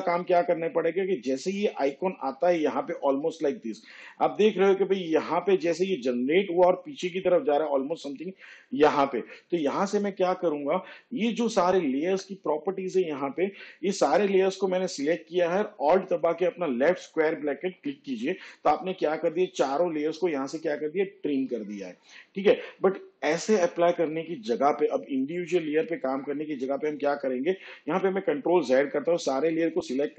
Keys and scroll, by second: 20.3 alt+[.